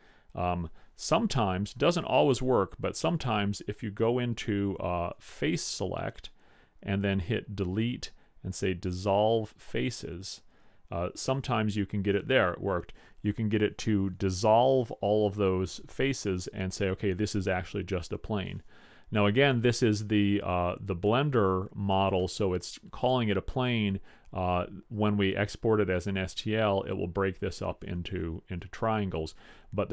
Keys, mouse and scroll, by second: 5.7 click, 7.6 Delete, 19.0-21.4 middle drag.